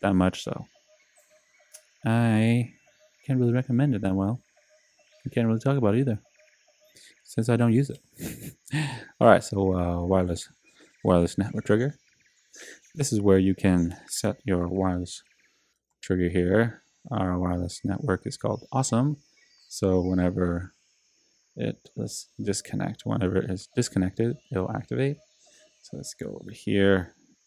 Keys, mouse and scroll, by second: 6.4 click, 14.5-16.4 typing, 23.0 click.